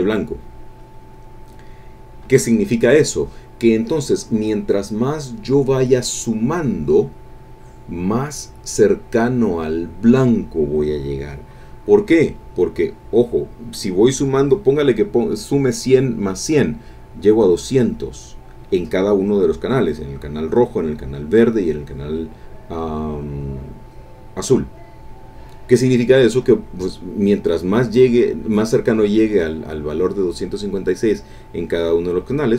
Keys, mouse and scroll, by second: 1.1 click.